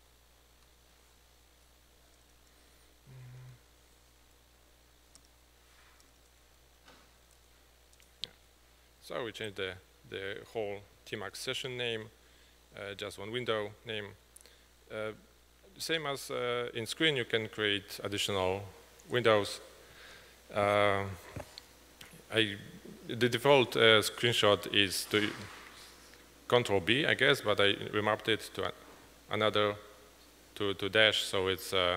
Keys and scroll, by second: 0.7 `, 3.5-3.9 typing, 6.4-7.9 typing, 8.0 Return, 29.5 typing.